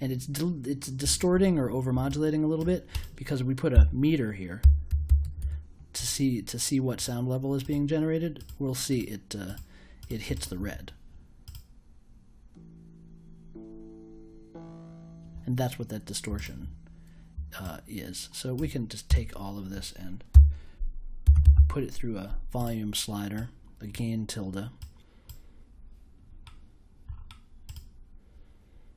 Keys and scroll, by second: 3.7-5.9 typing, 19.0 BackSpace, 20.3-22.0 typing.